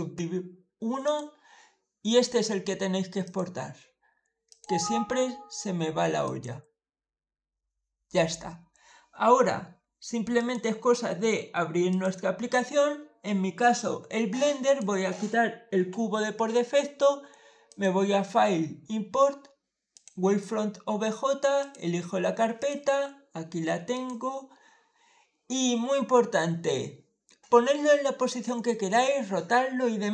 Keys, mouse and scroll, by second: 0.9 click, 3.1 click, 4.3 click, 6.1 click, 10.2 click, 11.7 click, 14.5 click, 17.5 click, 19.8 click, 21.4 click, 22.4 click, 23.8 click.